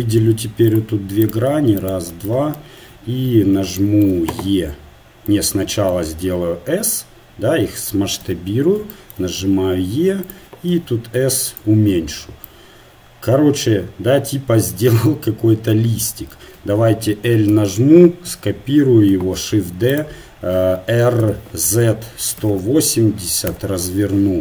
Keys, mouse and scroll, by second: 0.7 ctrl+Tab, 1.2-7.2 drag, 2.8 KP_1, 6.3 s, 8.8 KP_1, 9.5 e, 10.7 s, 17.5 l, 18.3 KP_1, 19.4 shift+d, 21.2 r.